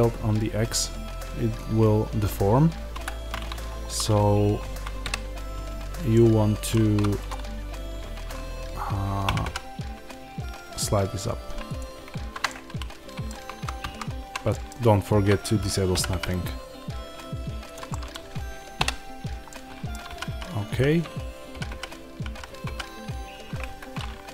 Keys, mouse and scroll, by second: 2.9 Escape, 4.9 KP_Divide, 6.7 2, 7.2 click, 9.2 g, 12.0 shift+Tab, 12.4-17.7 middle drag, 13.4 ctrl+z, 15.9 g, 17.7 click, 17.8-24.3 middle drag, 18.7 KP_Divide, 20.0 g, 23.7 Escape.